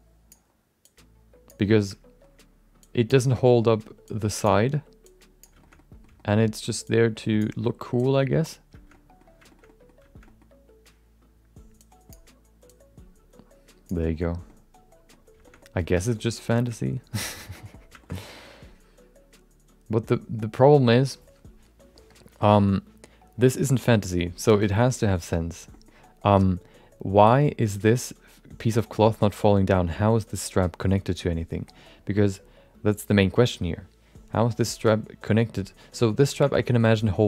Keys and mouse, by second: 0.8-1.9 drag, 1.8 shift+middle click, 1.8 shift+right click, 1.9 middle click, 2.8 click, 3.4 middle click, 4.0 click, 5.0 click, 5.9 middle click, 6.1 shift+middle click, 6.8 click, 8.0 click, 8.9 middle click, 9.5 shift+middle click, 9.6 middle click, 10.3 middle click, 11.8 click, 12.7-14.1 drag, 14.4 middle click, 15.4 shift+middle click, 15.6 middle click, 16.0 shift+middle click, 16.1 middle click, 16.6 shift+middle click, 16.8 middle click, 17.5 middle click, 18.0 shift+middle click, 18.1 middle click, 24.4 middle click, 25.8 middle click, 36.3 shift+middle click, 36.5 middle click, 37.0-37.2 drag.